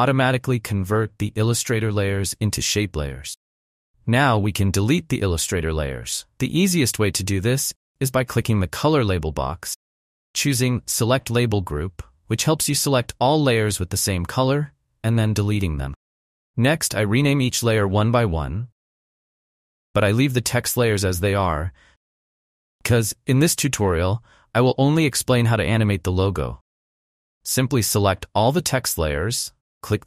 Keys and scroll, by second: 17.4 ctrl+Up, 17.4 Return, 17.7-21.6 typing, 17.8 Return, 17.9 ctrl+Up, 18.1 Return, 18.4 Return, 18.6 ctrl+Up, 18.7 Return, 18.9 Return, 19.0 ctrl+Up, 19.2 Return, 19.4 Return, 19.5 ctrl+Up, 19.6 Return, 19.9 Return, 20.0 ctrl+Up, 20.2 Return, 22.7 ctrl+Up.